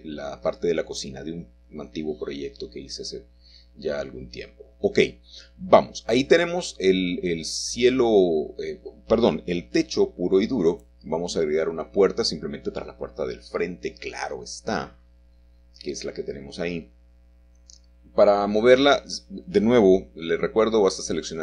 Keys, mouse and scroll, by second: 1.0-1.9 scroll up 3, 1.0 typing, 1.9-4.5 shift+middle drag, 6.2-8.8 shift+middle drag, 8.2-9.3 scroll down 2, 10.9 click, 13.2 g, 14.7 Escape, 16.3 middle click, 16.3-17.3 scroll up 1, 16.9-18.3 shift+middle drag, 19.0 shift+middle click, 19.9 click, 20.0-20.3 scroll down 1, 20.5 middle click, 20.6 g, 21.2 click, 21.3 scroll up 1.